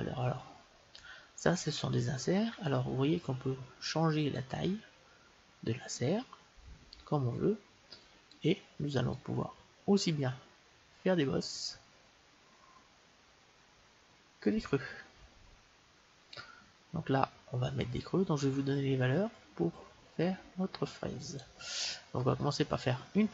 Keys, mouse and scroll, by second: 1.0-3.2 middle drag, 5.5 click, 9.4-11.1 drag.